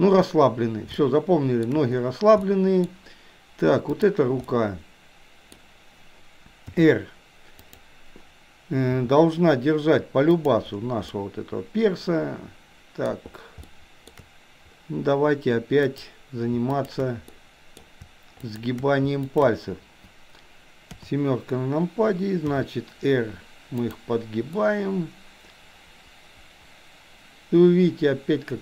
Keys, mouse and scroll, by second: 0.9-1.3 shift+scroll up 1, 1.3-1.8 shift+middle drag, 2.4-2.8 scroll up 1, 2.8-3.9 scroll down 1, 3.9 click, 4.6-5.6 middle drag, 6.7 r, 8.9 g, 11.2-13.2 middle drag, 13.7-14.1 shift+middle drag, 15.9 drag, 16.7 shift+click, 17.4 middle click, 18.6 shift+click, 19.4 shift+click, 20.9 KP_7, 22.6 r, 24.7-28.6 middle drag.